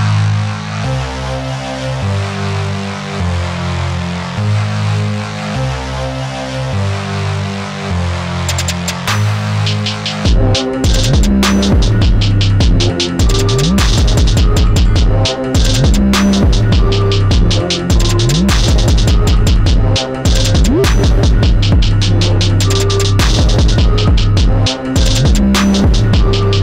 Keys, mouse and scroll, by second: 0.0-2.2 shift+drag, 2.2-7.4 alt+drag, 7.4 space, 8.2 click, 9.0 click, 9.4 space, 9.5 click, 10.2 space, 11.0-21.0 alt+drag, 25.2-26.6 alt+drag.